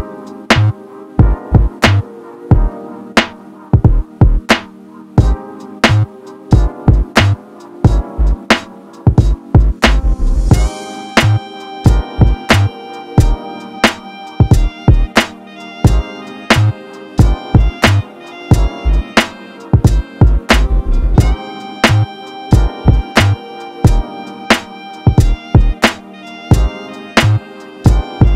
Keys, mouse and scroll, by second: 1.3-4.4 typing, 1.6 click, 3.8 shift+middle click, 4.0 click, 4.0 scroll down 2, 4.6 Tab, 4.7 scroll down 1, 4.8 click, 5.0 scroll up 2, 5.0 click, 5.9 scroll up 1, 6.0 shift+click, 6.5 scroll down 1, 6.6 click, 7.4 Tab, 7.7 shift+middle click, 7.8 Tab, 8.1 shift+click, 8.2 Tab, 8.4 ctrl+shift+middle click, 8.6 scroll up 2, 9.0-10.7 typing, 9.7 click, 10.9 Tab, 10.9 scroll down 1, 11.0-12.0 drag, 12.0 Tab, 12.1 scroll down 3, 12.2 shift+middle click, 12.4 scroll up 1, 12.7 g, 12.9 s, 13.1 Tab, 13.2 click, 13.6 scroll down 1, 13.7 shift+click, 13.9 Tab, 14.1 l, 14.2 r, 14.4 g, 14.5 r, 14.7 Tab, 14.8 scroll down 2, 14.9 click, 15.0-15.6 scroll up 3, 15.1 shift+click, 15.3 Tab, 15.4 shift+middle click, 15.7-18.2 typing, 16.5 Tab, 16.6 scroll down 1, 16.6 click, 16.9 Tab, 18.0 Tab, 18.4 Tab, 18.5 scroll down 3, 18.5 click, 18.6 scroll up 4, 18.9 click, 19.1 ctrl+z, 19.2 Tab, 19.2 s, 19.6 Tab, 20.0 scroll down 1, 20.1 click, 20.3 scroll up 1, 20.4 shift+click, 20.5 scroll down 1, 20.6 shift+click, 20.9 scroll up 3, 21.1 Tab, 21.3 s, 21.8 Tab, 21.9 scroll down 1, 22.0 shift+middle click, 22.2 scroll up 2, 22.3 click, 22.5 l, 22.6 r, 22.8 g, 23.0 Tab, 23.1 shift+click, 24.0 scroll down 1, 24.1 shift+middle click, 24.2 Tab, 24.4 l, 24.6 g, 24.7 Tab, 25.0 ctrl+middle click, 25.0 Tab, 25.1 click, 25.3 ctrl+middle click, 25.5 click, 25.6 shift+middle click, 25.7 click, 26.3 ctrl+middle click, 26.5 click, 26.7 ctrl+middle click, 26.8 click, 27.6 ctrl+middle click, 27.8 click.